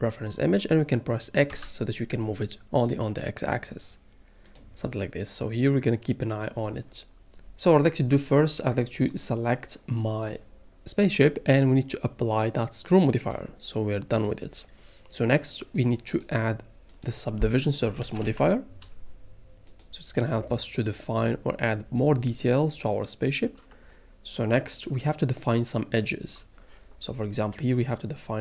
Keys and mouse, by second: 1.5 x, 8.9 click, 13.2-14.2 drag, 16.1-19.8 drag.